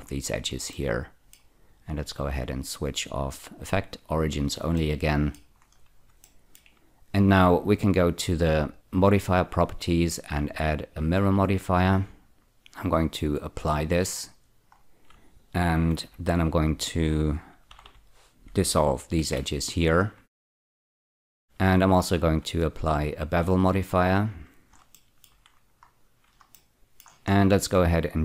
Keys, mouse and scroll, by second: 0.7 middle click, 2.4 click, 4.8 middle click, 5.6-6.1 scroll down 1, 6.3 shift+middle click, 6.5-6.9 shift+scroll down 2, 8.7 click, 9.9 click, 12.4 click, 13.6 click, 14.2 click, 14.8-15.9 scroll up 1, 15.9 Tab, 16.0 2, 16.9 click, 17.7 ä, 17.8 ä, 19.2 ctrl+x, 19.7-20.9 scroll down 2, 21.2 shift+middle click, 21.3 Tab, 22.4 click, 24.0 click, 25.0 shift+middle click, 25.5-26.6 scroll up 6, 26.6 middle click, 27.3-27.6 scroll up 1.